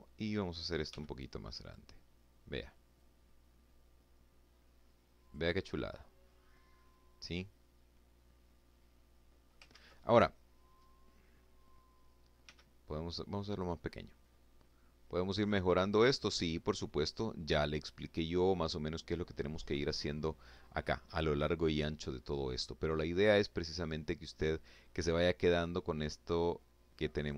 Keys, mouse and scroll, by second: 0.4 click, 1.8-4.3 drag, 4.4-7.6 middle drag, 7.6 click, 8.6 ctrl+z, 9.6-10.0 scroll up 2, 10.0-11.3 scroll down 2, 11.3 f, 12.3 click, 13.0-14.9 drag, 15.0 click, 16.0 click, 18.3-21.1 scroll down 2, 21.1 click, 22.2-22.5 scroll up 1, 22.7-23.9 scroll down 1, 23.9-26.3 drag, 26.4 ctrl+z, 26.9-27.3 ctrl+drag.